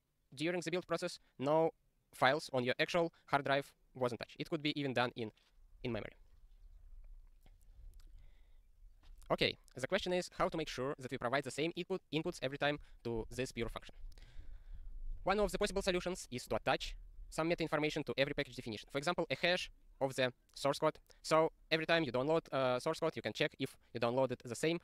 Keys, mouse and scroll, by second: 7.6-8.6 scroll, 8.6 click.